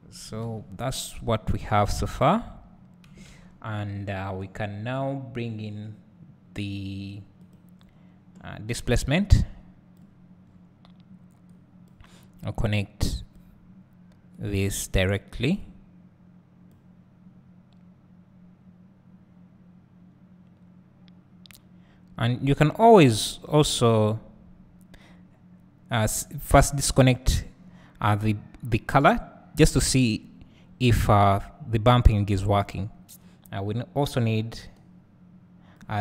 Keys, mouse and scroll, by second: 1.3 scroll down 1, 1.7 scroll up 1, 2.6 scroll down 1, 10.2 click, 11.5 click, 13.1 click, 17.1-36.0 drag.